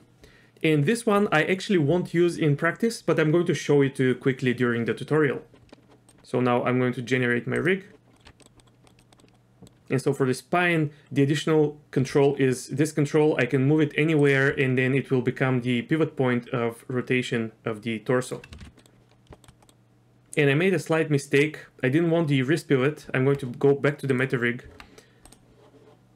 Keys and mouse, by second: 7.6 click, 8.1 middle click, 8.2 Tab, 8.4 middle click, 8.6 middle click, 9.0 click, 9.1 middle click, 9.3 middle click, 12.0 g, 14.5 r, 18.5 ctrl+z, 18.7 ctrl+z, 18.8 middle click, 19.3 shift+middle click, 19.6 middle click, 23.1 Tab, 24.2 click, 24.7 Tab, 25.3-25.7 drag.